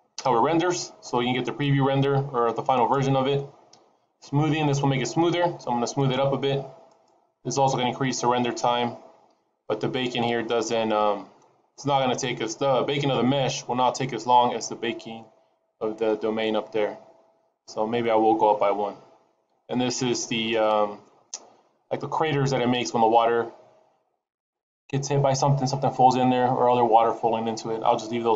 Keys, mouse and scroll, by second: 6.0 click, 6.9 click, 12.1 click, 13.5-13.9 scroll up 7, 16.2-16.7 scroll down 5, 18.7-21.7 scroll down 1.